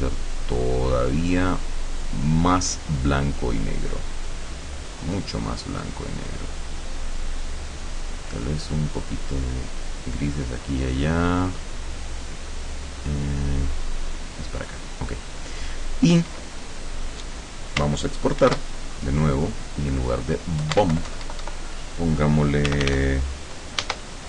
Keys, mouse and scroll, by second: 0.6-4.4 drag, 5.2-8.6 drag, 9.1-15.0 drag, 15.5 click, 18.5 ctrl+shift+e, 19.6 click, 20.7 BackSpace, 20.8 Caps_Lock, 21.0 Delete, 22.8 r, 23.0 f, 23.9 Caps_Lock.